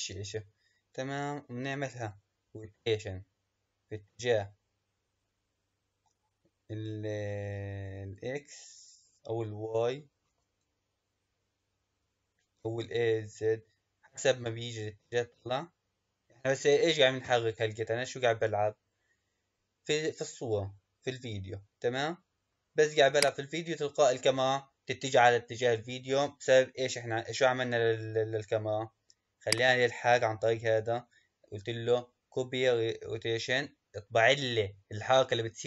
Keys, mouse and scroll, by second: 27.9-29.4 scroll up 3, 29.4 click.